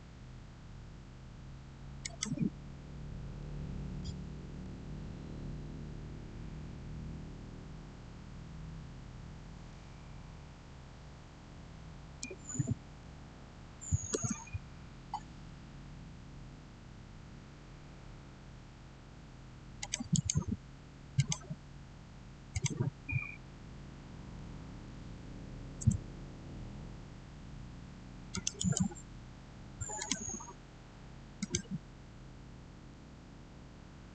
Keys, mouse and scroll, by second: 1.9 click, 4.3 typing, 14.0 Return, 15.5 scroll down 1, 18.5 scroll up 1, 19.6 scroll up 1, 19.7 click, 20.0 right click, 21.0 click, 24.9 click, 25.0 3, 25.6 Return, 28.2 click, 28.4 right click, 29.8 click.